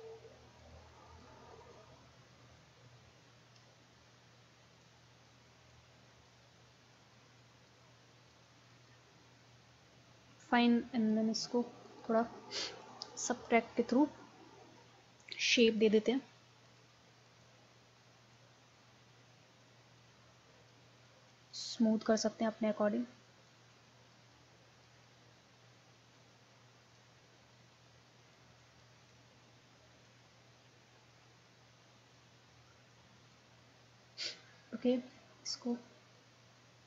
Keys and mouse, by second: 2.9 middle click, 4.9-7.2 middle drag, 9.3-12.6 middle drag, 12.6-15.4 drag, 15.5 ctrl+z, 28.6-30.9 drag, 31.3-33.1 drag, 33.3-35.2 drag, 35.7-36.8 drag.